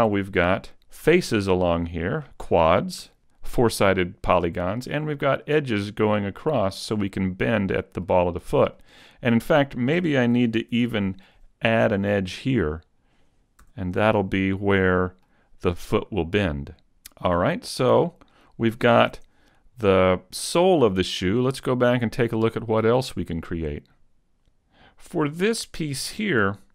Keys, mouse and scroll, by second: 1.1 right click, 2.0 right click, 3.0 a, 4.4 middle click, 5.8 middle click, 8.8 middle click, 10.8 ctrl+r, 13.0 click, 13.6 a, 13.9 middle click, 16.2 middle click, 19.2 Tab, 19.4-20.0 scroll down 3, 19.8 middle click, 22.9 click, 24.8-25.2 scroll down 2, 25.2 shift+middle click.